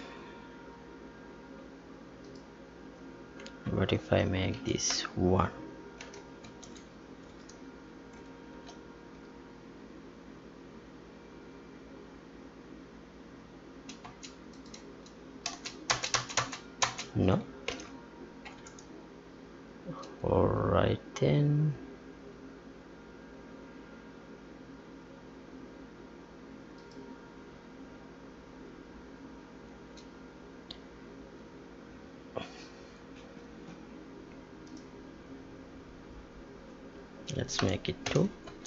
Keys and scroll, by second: 4.0 Left, 4.5 Delete, 6.4 ctrl+s, 7.5 Tab, 8.5 ctrl+p, 14.0 space, 15.4 space, 17.6 ctrl+p, 18.8 Tab, 37.5 Delete, 38.4 ctrl+s.